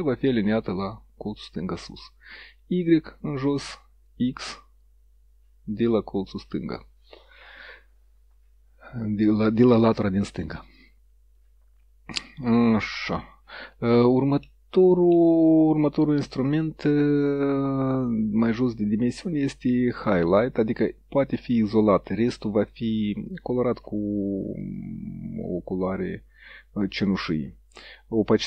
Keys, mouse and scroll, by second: 1.9 click, 4.1 click, 14.4 middle click, 20.0 click, 21.4 click, 22.0 click, 23.4 click, 24.7 click.